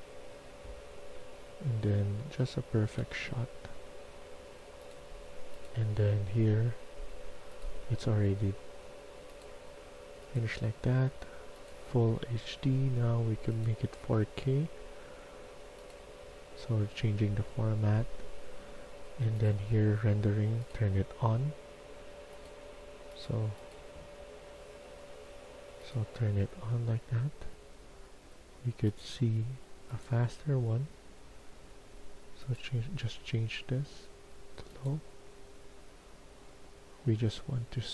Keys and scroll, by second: 0.4-1.4 typing.